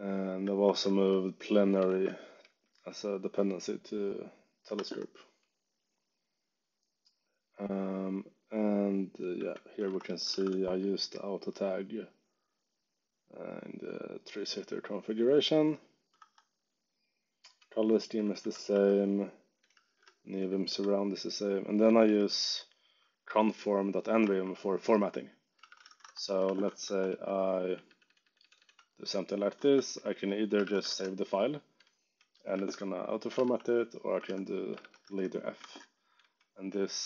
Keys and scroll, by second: 0.1-2.8 typing, 0.6 Escape, 4.7 Escape, 4.9 j, 8.6 j, 9.1 z, 9.8 Escape, 10.0 k, 10.3 shift+v, 16.1 Escape, 16.9 j, 18.1 z, 18.6 Escape, 18.7 j, 19.8 shift+5, 20.4 z, 21.2 j, 21.8 z, 24.2 Escape, 25.4-27.8 typing, 29.5 Escape, 30.3-37.0 typing, 35.5 ctrl+Tab.